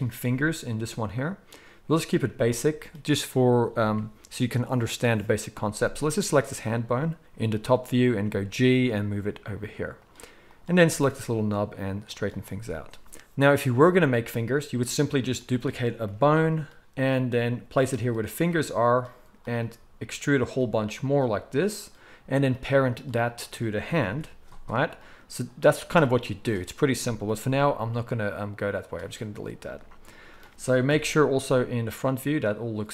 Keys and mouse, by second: 6.4 click, 8.2 g, 9.9 middle click, 10.5 click, 10.8-17.9 middle drag, 10.8 g, 16.0 shift+d, 17.9 click, 18.0-21.1 middle drag, 18.4 g, 19.6 g, 20.6 e, 21.1 e, 22.3 click, 22.9 shift+click, 24.0 ctrl+p, 25.5-32.9 drag, 27.4 x, 30.9 KP_1.